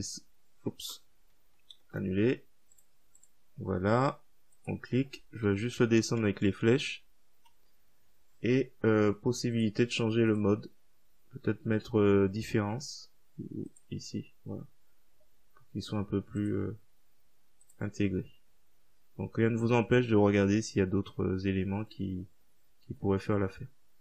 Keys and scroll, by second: 1.8 ctrl+z, 5.8 BackSpace, 8.2-8.9 typing.